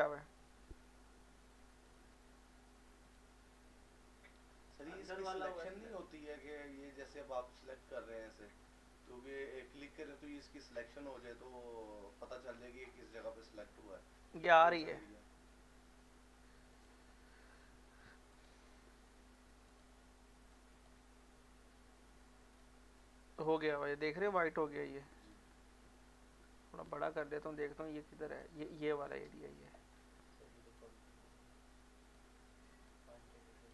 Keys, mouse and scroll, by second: 1.9 click, 4.4 x, 4.7 click, 6.5 click, 7.0 scroll up 1, 7.5 scroll up 1, 7.9 alt+middle click, 8.6 scroll down 1, 8.9-10.6 alt+middle drag, 10.6-12.5 drag, 12.5 scroll down 1, 12.8 scroll up 1, 13.0 scroll down 1, 16.8 click, 19.4 x, 19.7 click, 20.5-22.5 alt+drag, 27.2 shift+click, 29.1 click, 29.9 scroll up 1, 30.8-32.9 drag, 32.9 shift+click.